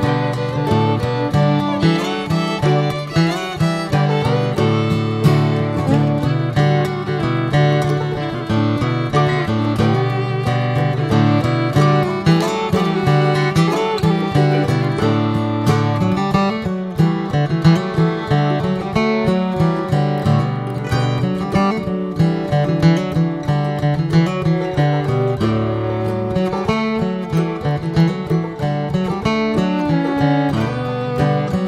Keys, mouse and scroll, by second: 0.2 r, 2.3 alt+middle click, 2.5-3.0 alt+scroll up 3, 3.1-3.6 shift+middle drag, 3.6 s, 4.6 click, 5.6 scroll up 1, 5.9-7.0 middle drag, 7.6-8.5 middle drag, 9.1 alt+middle drag, 9.6-9.9 scroll down 2, 9.9-12.5 middle drag, 13.0-13.7 shift+middle drag, 13.7 click, 15.2 r, 17.1 alt+middle click, 17.5-17.9 scroll up 3, 17.9-19.5 shift+middle drag, 19.5 s, 22.5 click, 23.2 alt+middle click, 24.1 click, 25.1-25.4 scroll down 3, 25.4-27.2 middle drag, 27.8 alt+middle click, 28.8 scroll up 1, 29.4 click, 31.3 alt+middle drag.